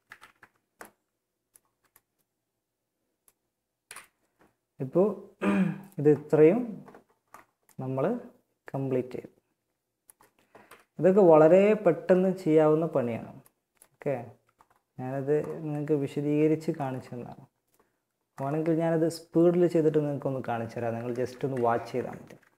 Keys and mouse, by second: 0.9 a, 3.0 KP_1, 9.8 KP_1, 19.0 Tab, 20.3 z, 21.0 a, 21.6 b.